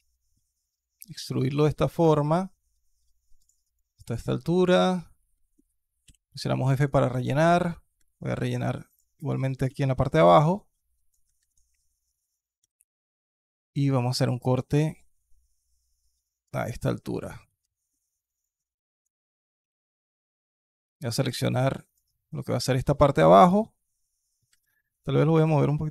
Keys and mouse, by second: 3.5 alt+click, 4.4 alt+click, 5.2 alt+click, 6.2 alt+click, 7.1 alt+click, 7.8 KP_2, 8.3 click, 8.7 alt+shift+click, 10.0 f, 11.2 alt+KP_1, 12.4 ctrl+r, 16.5 click, 17.4 alt+click, 18.2 alt+click, 19.4 z, 19.9 alt+click, 20.7 alt+KP_1, 21.0 KP_3, 21.3 click, 24.3 KP_1, 24.8 click.